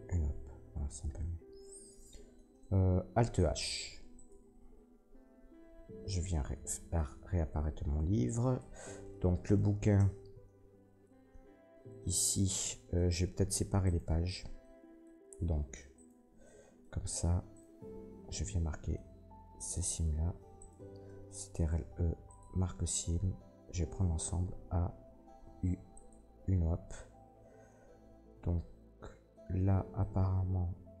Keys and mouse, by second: 3.6 alt+h, 4.1 middle click, 4.7 Tab, 5.7 alt+h, 8.5-13.3 drag, 9.4 middle click, 9.4 right click, 9.9 Tab, 13.3-14.6 middle drag, 14.6-15.9 drag, 15.9 alt+shift+middle click, 16.1-17.6 alt+shift+drag, 17.6 alt+shift+middle click, 17.7 alt+shift+click, 18.3-20.6 drag, 20.6 alt+shift+middle click, 20.7-25.4 alt+shift+drag, 21.5 ctrl+e, 24.2 a, 25.4 u, 30.3-31.0 drag.